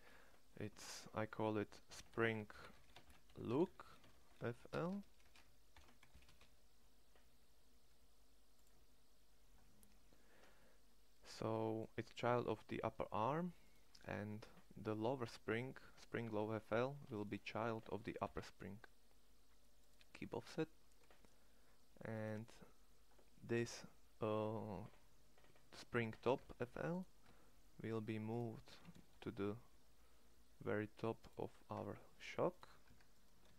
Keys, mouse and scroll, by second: 3.4 o, 4.6 BackSpace, 11.0 middle click, 14.1 right click, 18.0 ctrl+p, 23.1 middle click, 26.2 Tab, 27.3 Tab, 28.7 shift+s, 31.7 Tab, 32.6 Tab, 33.2 shift+s.